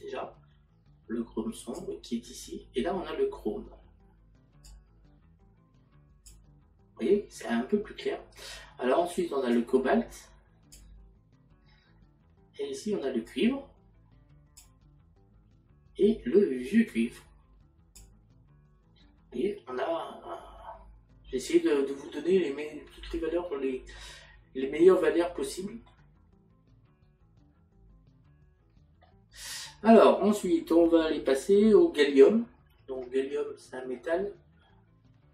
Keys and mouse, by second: 23.5 middle click, 25.0 middle click.